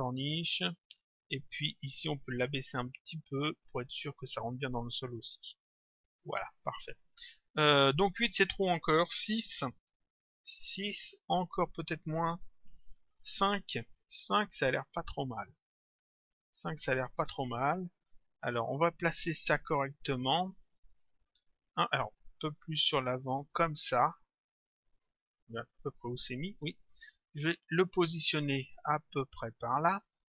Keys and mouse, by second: 1.7 click, 3.4 click, 5.3 click, 6.1 middle click, 8.4 click, 9.8 Return, 11.9 click, 13.4 Return, 15.3 click, 21.0 click, 24.7 click, 28.1 click.